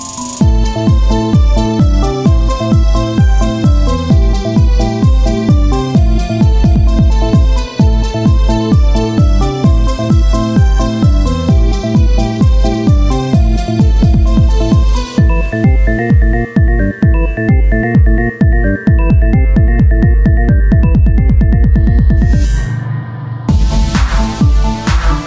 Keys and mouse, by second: 0.4 right click, 0.8 Tab, 1.5 Tab, 1.7-3.8 drag, 2.2 right click, 3.8 Tab, 3.9-5.9 drag, 6.1 Tab, 6.6 click, 6.7-7.7 right drag, 6.7 z, 7.0 c, 7.7 click, 8.0 e, 8.6 click, 8.8 z, 9.3-10.4 drag, 13.5 KP_1, 13.9 z, 14.7 r, 16.3-17.7 drag, 18.3 z, 19.2-20.9 middle drag, 19.5 c, 20.9 KP_1, 22.1 r, 23.3 click, 24.6 click.